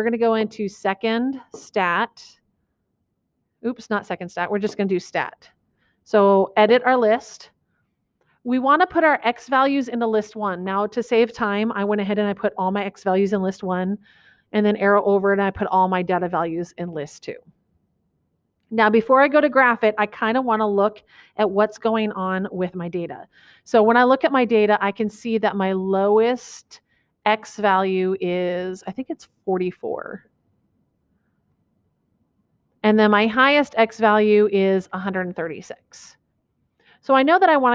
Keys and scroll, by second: 7.1 Return.